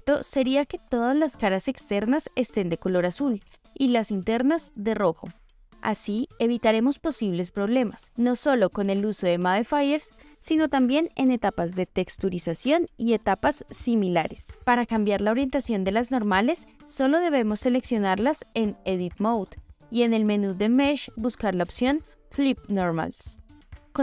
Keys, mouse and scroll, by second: 0.4-0.8 middle drag, 1.1-2.1 ctrl+middle drag, 4.0-4.8 shift+middle drag, 6.3-6.9 ctrl+middle drag, 7.2 shift+middle click, 7.8 shift+middle click, 8.5 ctrl+middle drag, 9.0 shift+middle drag, 10.0 click, 11.7-12.9 middle drag, 13.5 click, 14.7 shift+middle click, 15.5 shift+middle click, 16.2 middle drag, 16.6 shift+middle drag, 17.1 click, 17.6-17.9 drag, 18.6 click, 20.8-22.7 drag, 23.5 middle click.